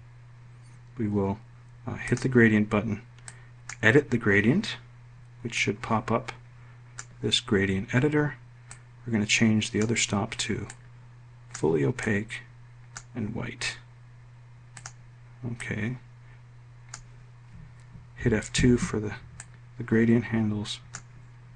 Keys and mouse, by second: 18.3 F2.